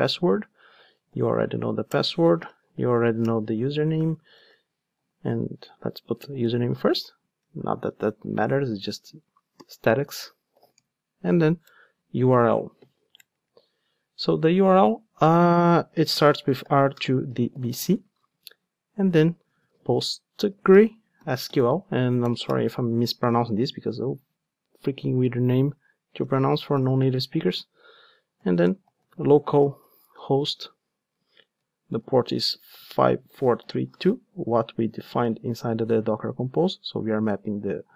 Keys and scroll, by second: 3.3 Return, 6.2 alt+shift+Up, 11.7 Return, 13.1 Return, 13.2 alt+shift+Up, 14.0 alt+shift+Down.